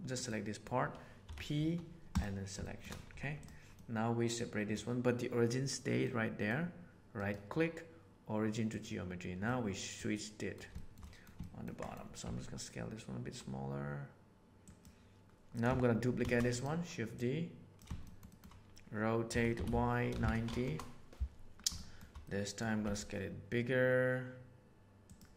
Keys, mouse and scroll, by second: 0.2 middle click, 1.2 p, 2.6 middle click, 3.0 Tab, 3.7-4.7 middle drag, 6.0 middle click, 7.2-8.7 drag, 9.4 middle click, 10.1 middle click, 10.7 shift+middle click, 11.0 middle click, 11.3 ctrl+middle click, 11.7 middle click, 12.1 s, 16.1 shift+d, 17.1 click, 18.0 middle click, 18.3 middle click, 19.2 r, 21.7 shift+middle drag, 22.2-22.6 middle drag, 22.8 s.